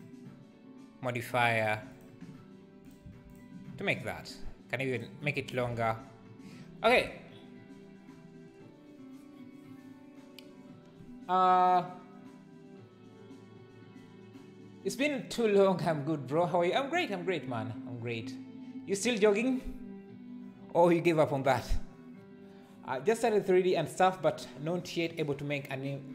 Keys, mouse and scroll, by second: 0.0-2.0 drag, 3.3 click, 5.0 click, 5.7 alt+a.